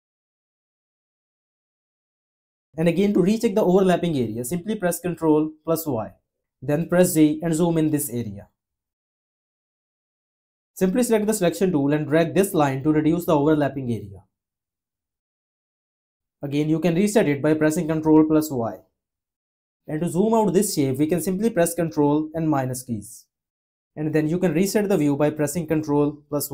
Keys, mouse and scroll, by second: 5.2 y, 6.6 z, 18.0 y, 21.9 -, 25.6 ctrl+y.